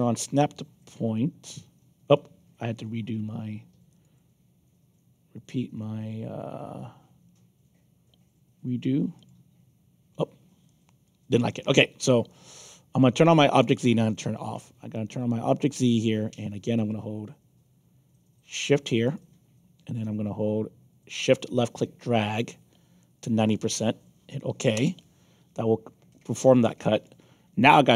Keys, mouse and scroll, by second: 1.1-2.1 alt+drag, 3.8 click, 9.1 click, 10.6 alt+click, 11.4 scroll up 2, 12.2 alt+click, 13.7 click, 15.6 click, 19.0 shift+click, 21.2-23.2 shift+drag, 24.7 Return, 26.1 alt+click.